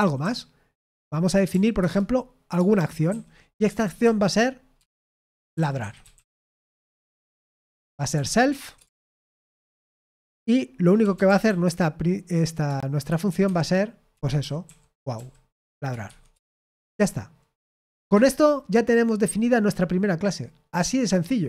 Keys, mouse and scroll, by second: 0.0-0.9 typing, 1.7 Return, 2.5-9.4 typing, 9.9 Tab, 10.7-12.1 typing, 13.4-17.1 typing, 18.0 Escape.